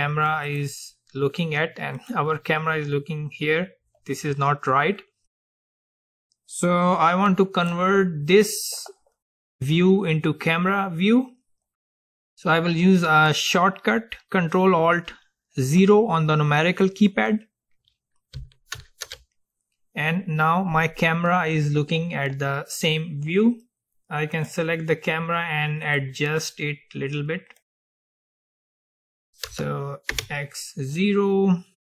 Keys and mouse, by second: 0.6-4.0 drag, 2.6-5.0 middle drag, 5.2-7.2 middle drag, 7.8-9.8 middle drag, 18.8 ctrl+alt+KP_0, 24.4-31.0 drag.